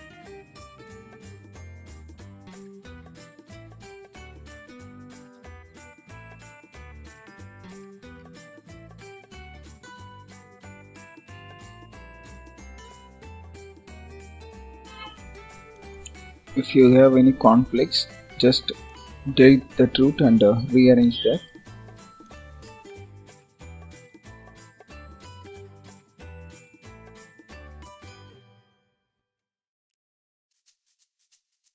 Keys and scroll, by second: 13.3 ctrl+z, 20.2 ctrl+s.